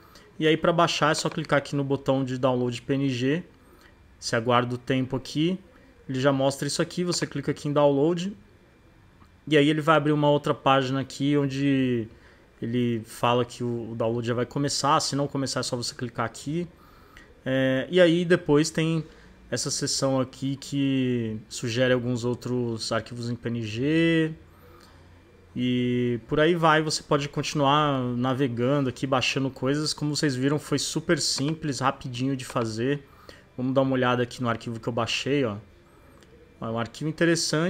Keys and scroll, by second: 35.1 space.